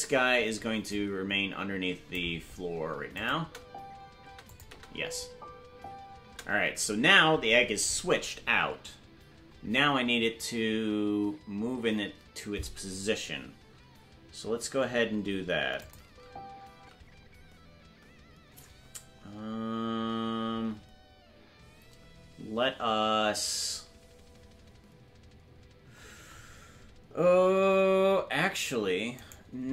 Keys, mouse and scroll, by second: 0.9 Left, 0.9-2.1 drag, 3.1 click, 3.4 space, 4.4 click, 4.4 space, 4.6 space, 8.1 space, 15.8 click, 16.0 space.